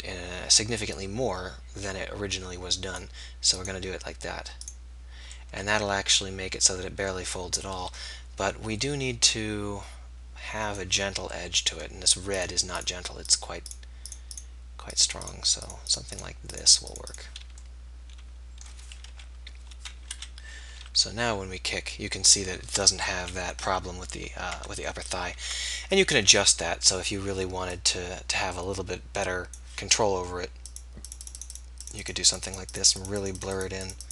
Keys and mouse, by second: 8.8-11.5 middle drag, 11.5-19.1 drag, 19.1 KP_3, 20.2 KP_1, 20.8 r, 22.8 click, 25.3 ctrl+z, 30.8-34.1 middle drag.